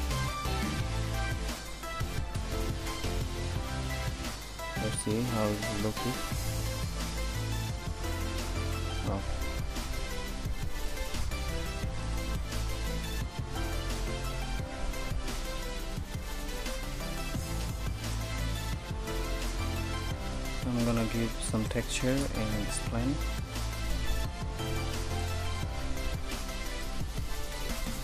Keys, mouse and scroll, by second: 5.9 shift+z, 8.6 shift+z, 11.9 ctrl+s, 15.2 n.